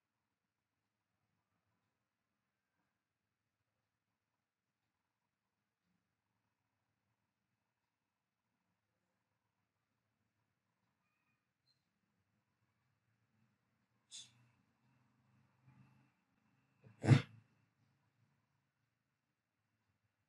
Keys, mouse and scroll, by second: 19.5 l.